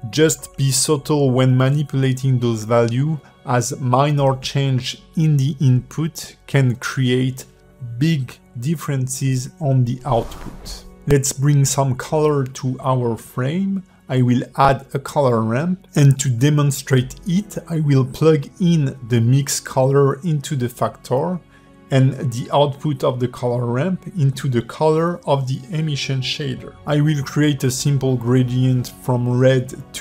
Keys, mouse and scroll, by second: 2.2 click, 3.7 click, 5.7 click, 7.6-8.3 scroll down 4, 8.3 click, 8.3-9.0 scroll down 1, 9.0 click, 9.6 click, 10.0 g, 10.5 scroll up 3, 10.9 shift+a, 15.9 click, 18.2 click, 20.0-21.2 scroll up 3, 21.3 click, 22.4 click, 27.6 click, 28.2 click.